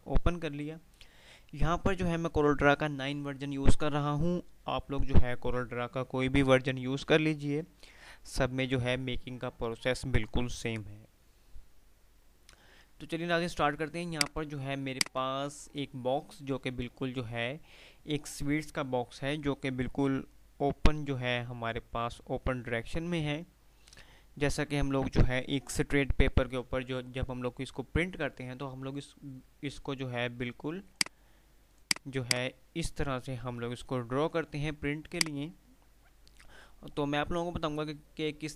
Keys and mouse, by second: 13.7 F5, 14.1 F2, 17.3 typing, 31.0-34.6 drag.